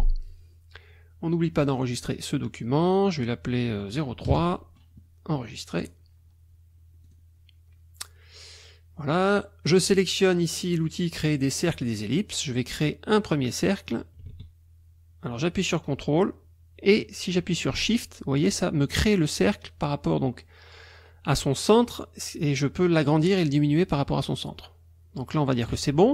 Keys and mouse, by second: 1.7 click, 4.3 KP_0, 5.8 click, 7.1 click, 11.7 click, 13.5-25.8 drag.